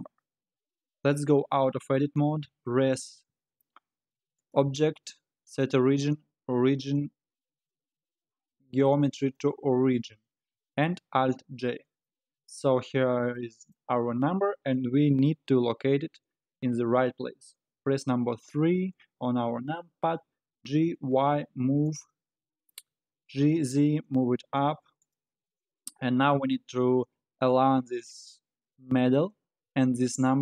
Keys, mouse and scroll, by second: 0.4 scroll up 4, 0.9 scroll down 2, 1.6 Tab, 4.4-7.5 drag, 10.1-10.7 scroll up 5, 10.7 scroll down 1, 11.2 alt+g, 12.1-13.9 middle drag, 13.9 scroll down 2, 18.1 KP_3, 20.3 g, 25.4-26.4 scroll down 7, 26.4-29.1 scroll up 1.